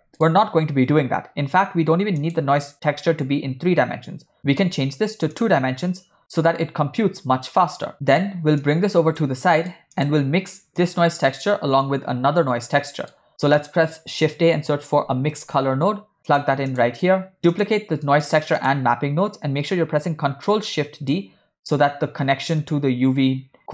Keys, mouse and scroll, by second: 0.2 middle click, 2.2 click, 4.7-5.8 drag, 7.9 click, 8.7 click, 9.4 middle click, 10.0 click, 10.9 click, 12.9 middle click, 13.3 shift+a, 17.6 click, 18.1 shift+middle click, 18.6 shift+click, 20.9 ctrl+shift+d.